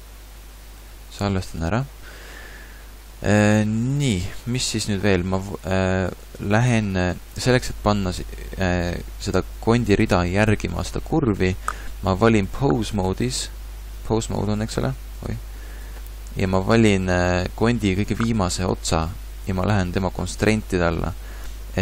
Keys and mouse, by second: 0.0 ctrl+shift+s, 0.9 ctrl+s, 6.7 middle click.